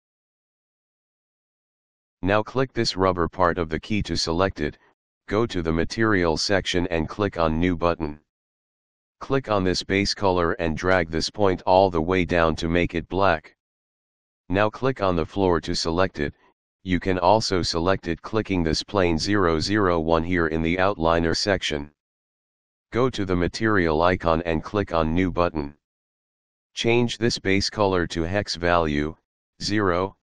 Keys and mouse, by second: 0.2 Return, 3.3 click, 6.5 click, 9.8 click, 11.7 click, 17.2 click, 24.3 click, 26.7 click, 28.0 click.